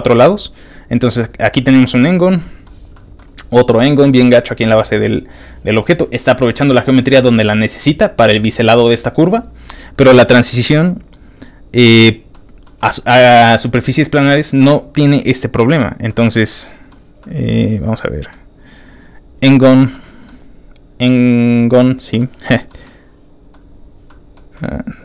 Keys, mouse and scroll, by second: 1.5 middle click, 2.3 middle click, 3.0 middle click, 3.8 middle click, 4.6 middle click, 9.7 scroll down 1, 10.2 middle click, 12.4-13.5 middle drag, 14.0 middle click, 14.6 middle click, 15.5 middle click, 16.1 middle click, 17.2-18.3 middle drag, 18.2 scroll down 1, 19.9 middle click, 22.2 middle click, 22.8 middle click, 24.1 middle click, 24.5 middle click.